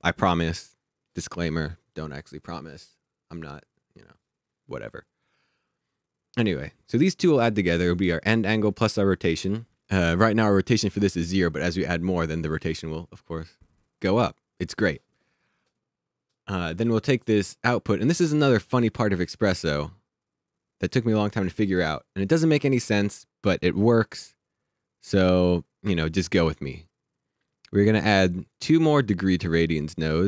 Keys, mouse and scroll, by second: 9.8 click, 15.8 click, 23.9-26.0 scroll up 1, 26.2-27.7 scroll down 1, 27.9 click, 30.0 click.